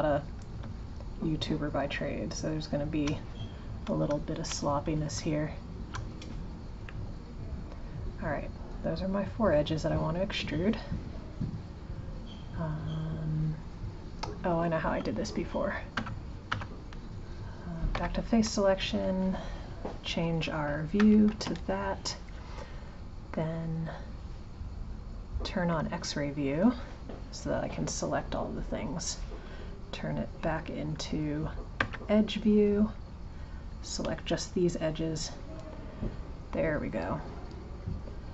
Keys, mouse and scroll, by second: 1.1 shift+click, 1.7 shift+click, 2.7 shift+click, 4.2 shift+click, 5.5 shift+click, 6.8-9.9 middle drag, 15.9 Tab, 16.5 Tab, 17.9 3, 18.7 click, 21.0 shift+KP_7, 24.8-27.9 drag, 31.8 2, 32.6 click.